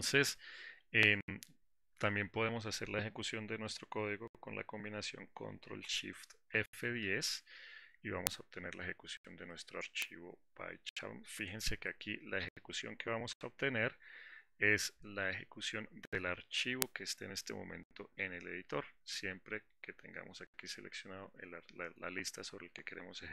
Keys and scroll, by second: 6.8 ctrl+shift+F10, 13.8 alt+4.